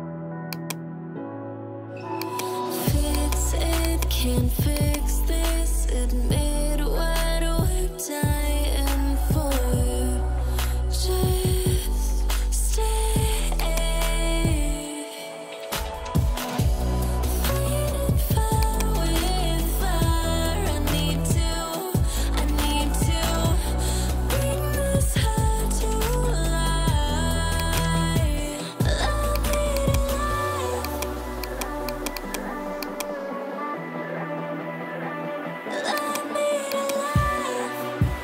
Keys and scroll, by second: 4.3 ], 17.9 ], 28.4 [, 30.5 ].